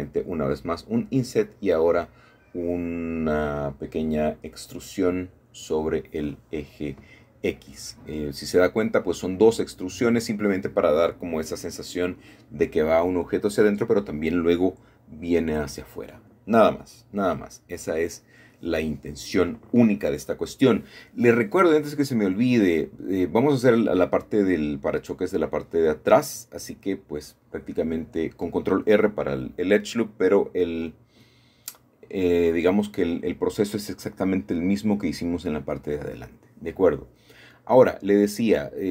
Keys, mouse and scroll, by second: 1.6 shift+click, 5.8 shift+click, 6.0 typing, 6.2-8.1 middle drag, 9.0-10.8 scroll down 2, 10.8-11.7 scroll down 3, 10.9 middle click, 12.7-13.4 scroll up 3, 12.7 shift+middle click, 13.4-14.2 shift+scroll down 2, 13.8 shift+middle click, 15.0-17.8 shift+middle drag, 15.0-15.5 scroll down 1, 18.3-20.7 shift+middle drag, 21.0-21.6 scroll up 2, 24.7-25.9 middle drag, 26.4 ctrl+r, 27.4 click, 29.0 click, 29.6 middle click, 30.9-32.1 middle drag, 32.7-33.8 shift+scroll up 2, 34.1-35.1 scroll down 2, 34.6 middle click, 38.6-38.9 middle drag.